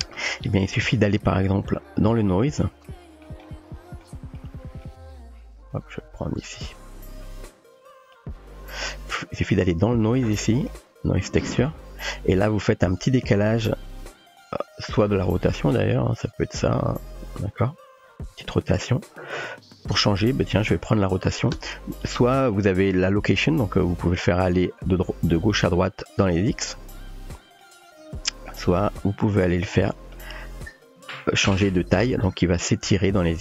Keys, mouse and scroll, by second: 1.4 middle click, 2.4-3.2 middle drag, 3.4-4.0 shift+middle drag, 4.4-4.8 middle drag, 6.6 click, 8.3 click, 10.2 click, 11.6 click, 12.2 middle click, 14.7 middle click, 15.7-20.5 drag, 22.7 click, 23.7-27.7 drag, 28.6 middle click, 29.9 middle click, 30.8-33.4 drag.